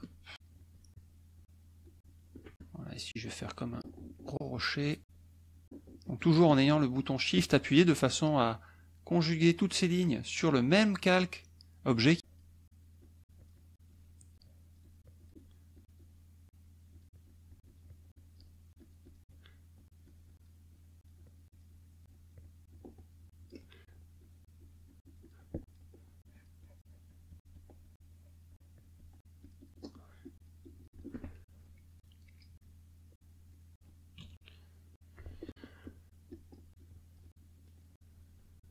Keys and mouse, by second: 0.3-2.4 shift+drag, 2.5 shift+middle click, 2.8-4.6 shift+drag, 5.0-6.3 shift+drag, 12.2 shift+click, 13.0-15.4 shift+drag, 15.7-19.3 shift+drag, 20.0 shift+click, 20.6-23.6 shift+drag, 24.2-25.4 shift+drag, 25.5 shift+click, 26.2-29.2 shift+drag, 29.4 shift+click, 30.2 shift+click, 31.3 shift+click, 33.0 click, 34.2 KP_Subtract, 34.7 click, 36.3 shift+click, 36.8-37.8 shift+drag.